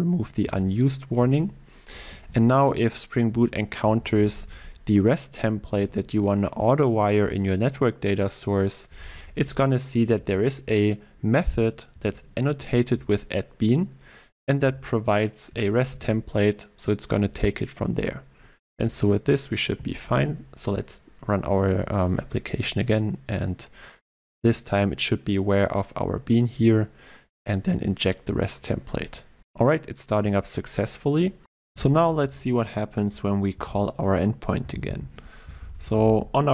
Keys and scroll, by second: 2.1 ctrl+e, 9.4 ctrl+e, 15.9 ctrl+w, 19.7 ctrl+w, 19.9 shift+F10.